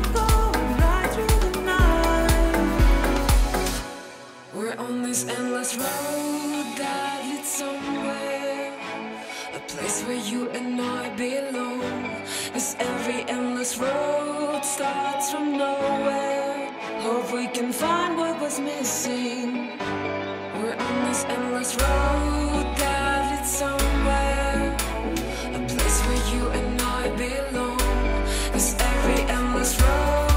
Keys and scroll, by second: 0.7 super+z, 6.5 space, 7.1 space, 9.4 super+z, 11.1 ], 11.9 [, 14.9 space, 16.9 space, 19.5 super+z, 25.1 ], 28.3 space.